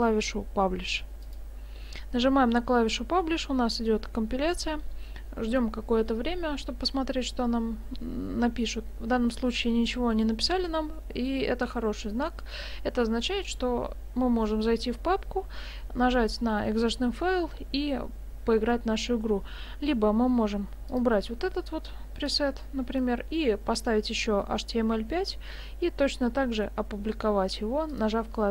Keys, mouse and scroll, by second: 1.2 click, 20.9 click, 22.3 click, 27.9 click.